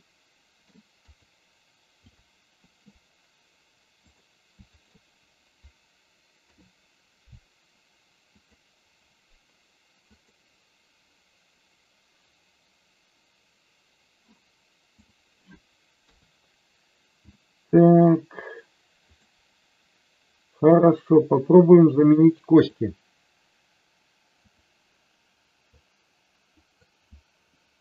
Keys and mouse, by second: 0.0 middle click, 1.2 click, 4.8 shift+click, 6.4 ctrl+p, 10.1 click, 16.0 KP_3, 17.3-18.2 shift+middle drag, 19.2 click, 20.8 click, 22.7-24.6 drag, 25.8 click, 27.6 Delete.